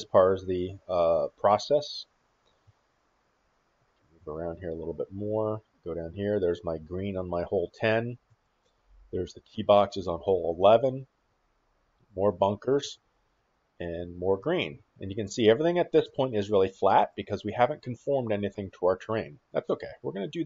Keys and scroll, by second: 2.4 shift+`, 4.5 shift+w, 5.9 shift+s, 6.6 shift+w, 7.6 shift+e, 8.4 shift+w, 11.8-14.8 typing, 15.9-18.1 typing.